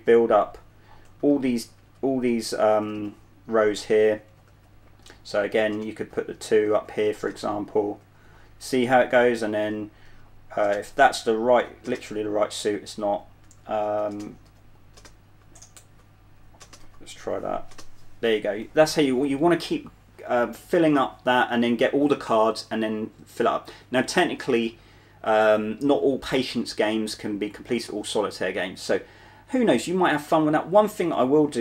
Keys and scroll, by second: 0.0-4.8 typing, 6.0-8.3 typing, 9.7 typing, 11.0-11.9 typing, 13.4-15.7 typing, 16.9-17.5 typing, 31.4 q.